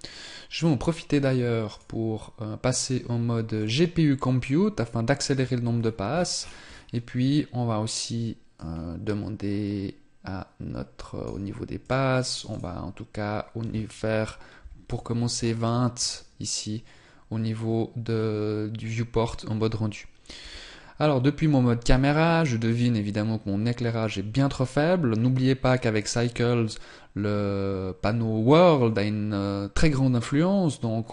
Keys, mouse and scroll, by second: 1.3 click, 5.6-6.2 scroll down 8, 8.5 click, 8.5-9.9 scroll down 9, 11.8 click, 20.4 KP_0, 25.2 click.